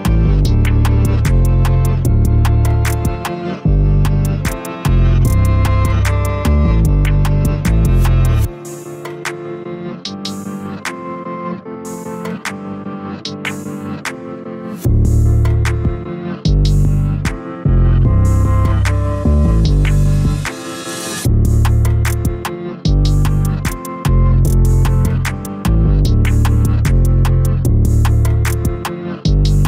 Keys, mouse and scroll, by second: 1.2-1.8 scroll up 1, 1.8 alt+s, 3.5-4.1 scroll down 1, 4.1 s, 5.4 alt+s, 6.6-8.1 middle drag, 8.1 a, 8.3 a, 9.2 click, 9.4 click, 9.8-10.8 middle drag, 10.8 shift+d, 12.3 p, 12.9 Tab, 13.2 click, 13.6 Tab, 13.9 a, 14.3 e, 16.7 a, 17.0 g, 19.0 a, 19.1 a, 19.5 middle click, 20.5-21.1 scroll up 1, 21.1 3, 21.3 click, 21.5 click, 22.4 e, 24.7-27.6 middle drag, 27.6 2, 27.7 click, 27.9 click, 29.5 g.